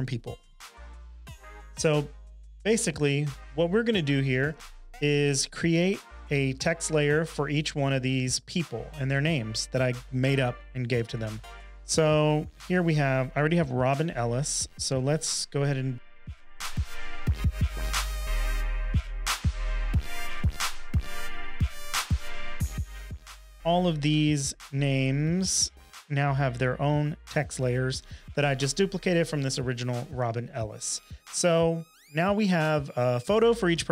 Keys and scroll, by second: 15.9-17.2 typing, 18.0 super+c, 18.1 Return, 19.7 super+Return, 21.1 super+a, 21.2 super+c, 21.3 Return, 22.9 super+Return.